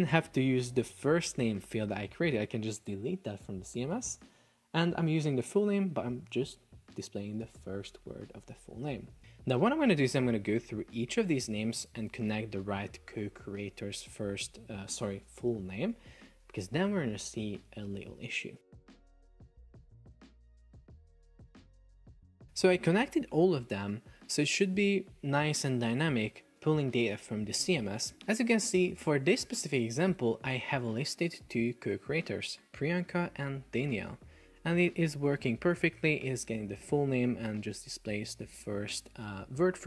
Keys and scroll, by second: 19.1 Delete, 20.7 Delete.